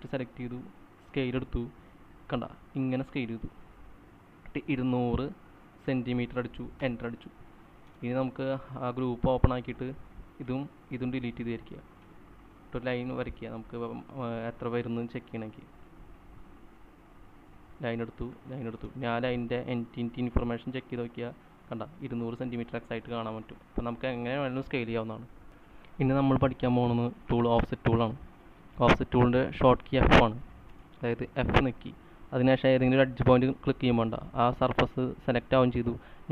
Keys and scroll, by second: 2.5-3.2 typing, 4.9-6.8 typing, 7.3 Return, 8.3 Return, 8.5 space, 9.5 typing, 10.8 Delete, 12.5 Delete, 12.6 Delete, 19.3 space, 26.0 c, 31.8 typing.